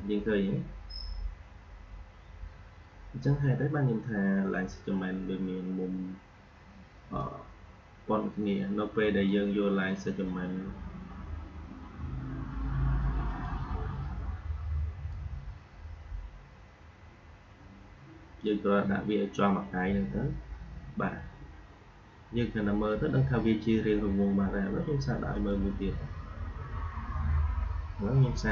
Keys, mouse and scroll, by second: 7.1-11.6 drag, 13.2-20.8 drag, 25.2 click.